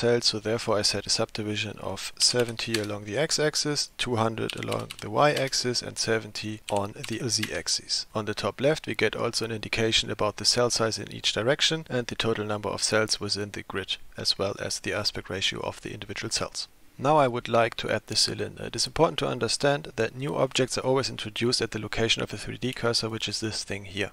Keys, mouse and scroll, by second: 1.6-3.6 drag, 3.9-6.3 drag, 5.0 KP_0, 6.5-8.1 drag, 23.1 shift+click, 23.1 shift+right click, 23.5 shift+click, 23.5 shift+right click, 24.0 shift+click, 24.0 shift+right click.